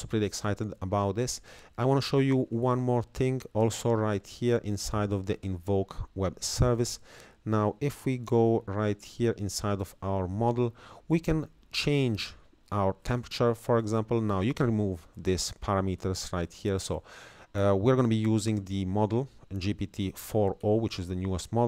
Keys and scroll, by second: 13.8 Right, 14.2 Left, 15.6 Up, 16.6 Down, 18.2 Up, 18.9 Right, 20.0 Right.